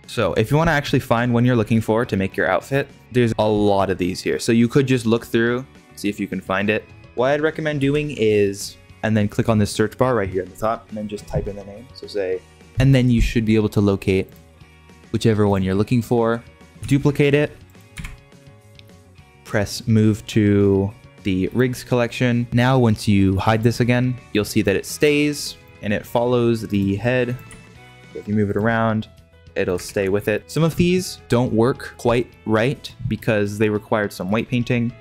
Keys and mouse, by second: 7.0 alt+h, 7.7 h, 8.9-14.2 drag, 15.4 click, 16.8 shift+d, 17.9 m, 23.5 click, 24.6-25.1 middle drag, 25.6 click, 25.7 r, 27.5 g, 28.7-29.8 middle drag, 29.8 ctrl+Tab, 30.3 middle drag, 31.2 Delete, 33.4-35.0 middle drag.